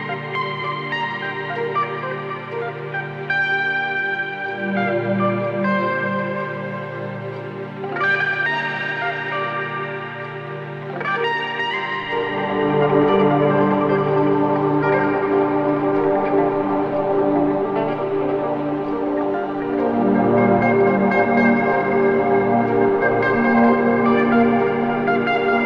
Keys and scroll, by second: 5.0 3, 5.6 ], 6.9 4, 12.2 ctrl+d, 12.3 Escape, 16.1 ctrl+d, 16.1 Escape, 22.5 3.